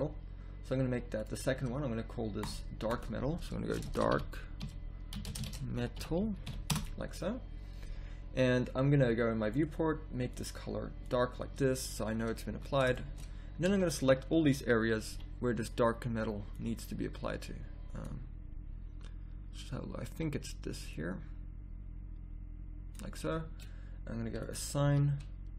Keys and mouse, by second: 1.2-7.6 drag, 9.5-11.4 drag, 12.5 z, 13.7 z, 15.1 b, 20.1 b, 24.8 a.